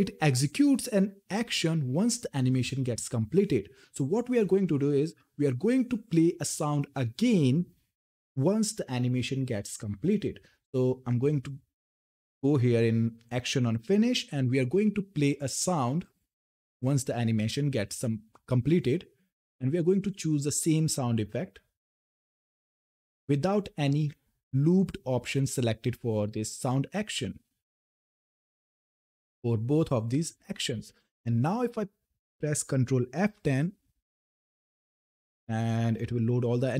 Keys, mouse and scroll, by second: 11.5-11.8 scroll down 1, 11.8 click, 15.7-19.9 drag, 27.3 click, 32.9 ctrl+F10.